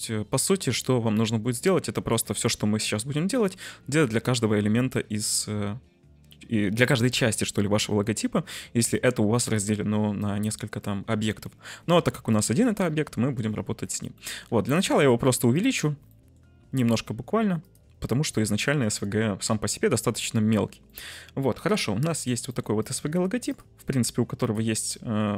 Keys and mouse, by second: 12.9 middle click, 14.2 middle click, 14.8 s, 15.4 click, 16.0 middle drag, 16.6 s, 17.5 click, 18.5-19.5 middle drag, 20.9 middle click, 22.4 middle drag, 24.3 right click, 25.0 middle click.